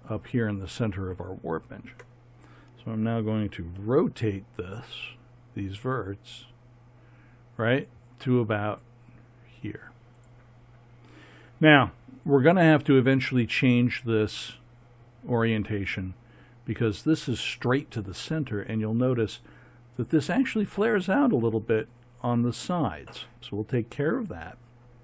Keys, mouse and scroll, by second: 3.8 r, 7.2 r.